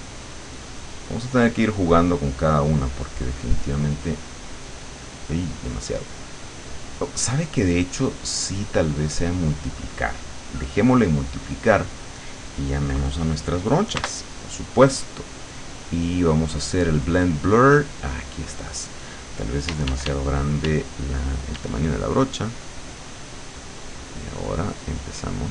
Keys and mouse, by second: 1.5 click, 3.5-4.5 drag, 6.1-9.5 drag, 11.5 click, 14.0 b, 15.8 click, 18.1 click, 19.7 d, 21.6 d, 22.4 click.